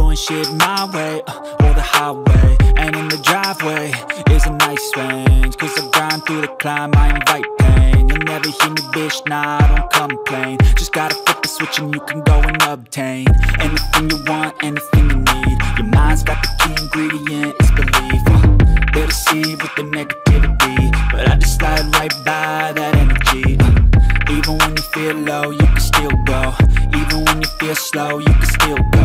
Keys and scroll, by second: 2.4 ctrl+j, 3.5 ctrl+t, 12.3 ctrl+t, 20.0 ctrl+e.